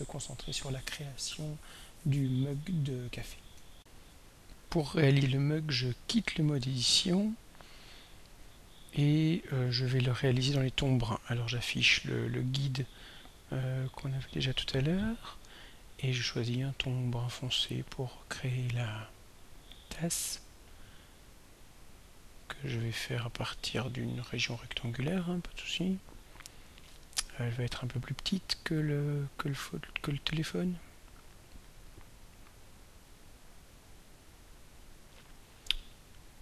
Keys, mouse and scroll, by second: 3.7 r, 6.2 click, 7.3 click, 11.6 click, 19.3 click, 23.3 click, 30.8-35.0 drag.